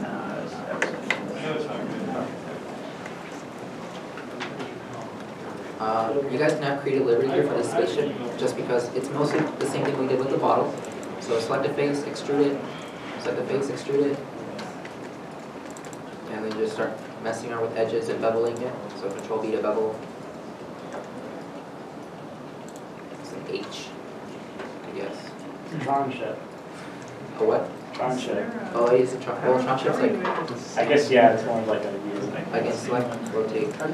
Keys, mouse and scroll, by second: 0.0 middle click, 0.0 ctrl+z, 0.8 middle click, 1.3 middle click, 4.6 shift+middle click, 8.8 middle click, 10.8 middle click, 12.4 e, 13.1 middle click, 13.6 e, 14.3 middle click, 15.7 middle click, 17.2 middle click, 19.2 ctrl+b, 20.7 middle click, 21.4 middle click, 21.4-22.2 scroll down 1, 22.3 scroll down 1, 26.3 3, 27.5 middle click, 27.6-30.0 scroll, 31.5 middle click, 33.3 typing.